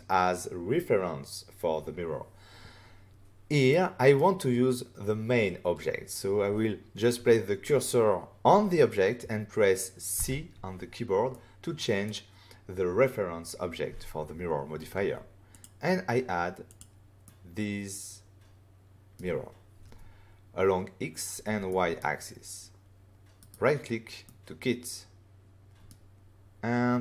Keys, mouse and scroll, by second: 3.7 middle click, 10.1 c, 11.3 middle click, 15.5 click, 16.6 click, 17.2 middle click, 21.7 middle click, 23.3 right click, 24.2 middle click.